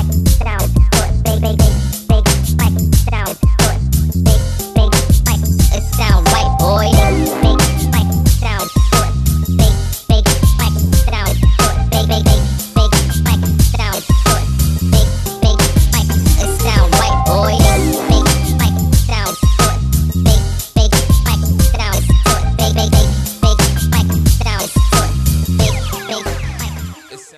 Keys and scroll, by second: 6.1 Escape, 12.2 ctrl+s, 13.9 1, 14.0 2, 14.2 3.